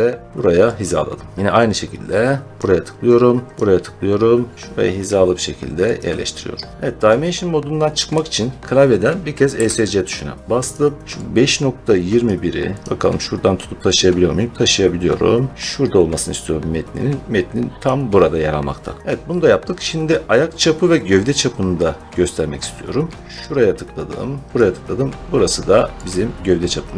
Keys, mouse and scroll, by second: 0.7 click, 2.5 click, 3.4 scroll, 3.5 click, 5.9 click, 9.4 Escape, 10.6 click, 12.1 click, 12.8 click, 17.7 click, 19.0 middle click, 19.0-19.4 scroll down 3, 21.5 scroll, 23.2 click, 23.3 click, 24.5 click, 26.0 click.